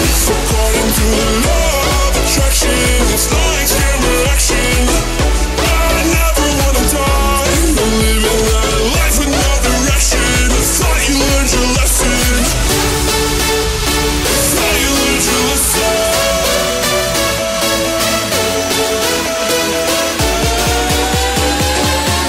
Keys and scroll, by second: 3.8 ctrl+t.